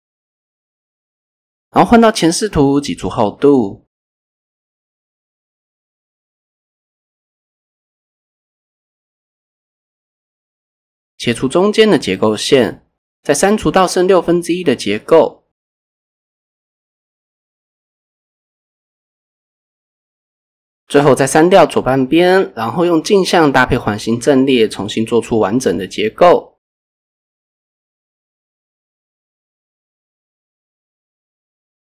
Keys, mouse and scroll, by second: 0.3 a, 0.5 KP_1, 1.6 e, 3.0 click, 3.7 KP_8, 6.2 KP_7, 7.0 shift+middle click, 7.3 shift+scroll down 1, 7.6 scroll up 1, 10.6 ctrl+r, 10.9 click, 11.1 click, 11.1 right click, 11.4 ctrl+r, 11.8 click, 12.0 right click, 13.4 click, 14.2 click, 16.4 x, 17.4 drag, 18.2 x, 18.8 drag, 19.5 x, 20.3 click, 20.9 x, 21.6 Tab, 22.7 click, 23.0-25.3 drag, 25.9-26.4 drag, 27.5 click, 28.6 click, 30.1 shift+a.